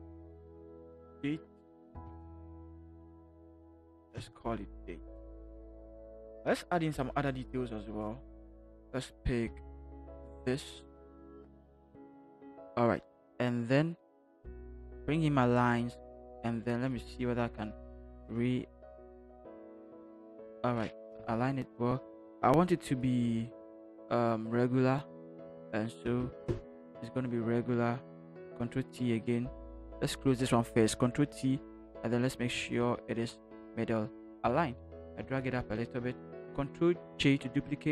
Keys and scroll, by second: 0.8 d, 2.0 BackSpace, 2.1 BackSpace, 2.6 Caps_Lock, 4.1 d, 4.1 a, 6.8 t, 11.2 ctrl+c, 12.0 ctrl+v, 15.0 ctrl+h, 16.3 v, 18.1 t, 21.1 Return, 30.8 ctrl+t, 32.5 Right, 32.7 Right, 32.8 Right, 33.0 Right, 33.2 Right, 33.6 Right, 34.4 Right, 34.8 Return, 35.1 Up, 35.3 Up, 35.5 Up, 35.6 Up, 35.8 Up, 37.2 ctrl+j.